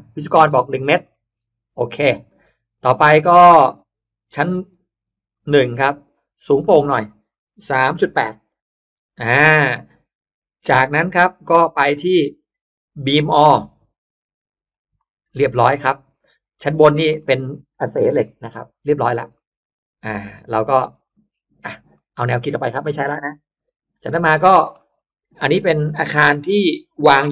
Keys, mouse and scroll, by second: 0.3 click, 1.0 middle click, 1.2-1.6 scroll up 1, 2.1 click, 3.2 click, 4.5 click, 5.2 click, 6.3 click, 7.4 3, 7.9 8, 8.4 Return, 10.6 click, 11.7 click, 12.8 click, 13.5 click, 14.6 click, 15.2 middle click, 15.2 scroll up 1, 15.4-16.2 scroll down 2, 15.9 space, 16.3 click, 17.1 middle click, 17.9 Delete, 18.1 scroll up 1, 18.1 middle click, 18.9-19.3 scroll down 1, 19.3 middle click, 19.3 scroll up 1, 20.0 click, 20.2 click, 21.0 middle click, 21.3 Escape, 21.5 Escape, 21.8 click, 22.3 click, 23.1 middle click, 23.3 Delete, 23.5 middle drag, 24.1 click, 24.7 middle click, 26.4 m, 27.0 click.